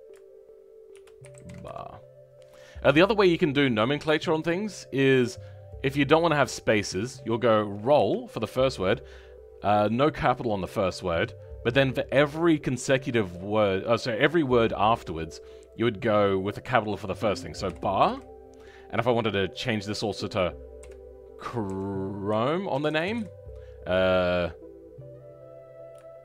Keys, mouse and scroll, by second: 4.2-26.2 drag.